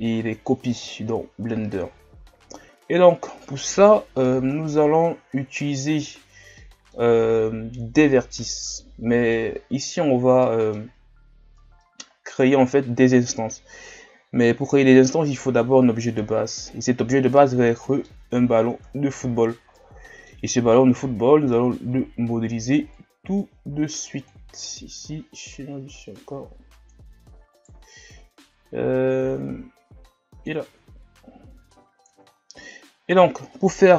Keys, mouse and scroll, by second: 1.8 scroll up 4, 4.2-5.0 middle drag, 5.0-5.8 scroll up 1, 5.8-6.2 scroll down 4, 6.6-9.6 middle drag, 10.4-11.0 middle drag, 11.0-11.6 scroll up 3, 11.6 middle click, 12.0-14.4 scroll up 2, 14.4-18.7 middle drag, 18.7 Tab, 19.8-21.0 middle drag, 21.0 KP_1, 22.1 shift+scroll down 3, 22.9-24.7 drag, 24.7 s, 27.5 alt+right click, 28.6-30.7 drag, 30.7 Tab, 31.3 scroll down 1, 32.2-32.7 shift+scroll down 5, 32.7 scroll up 1.